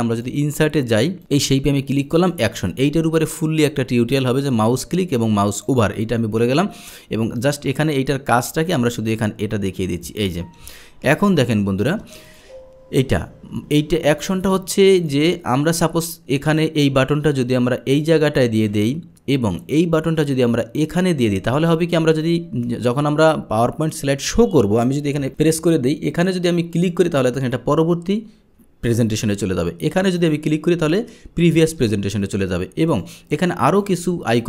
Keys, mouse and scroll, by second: 0.2 drag, 2.2 click, 5.7 click, 7.4 click, 8.7 drag, 9.8-11.9 drag, 12.4 click, 14.4 drag, 15.0 click, 16.5-18.8 drag, 19.6-21.3 drag, 26.8 click, 30.2 click, 32.9 drag, 33.9 click.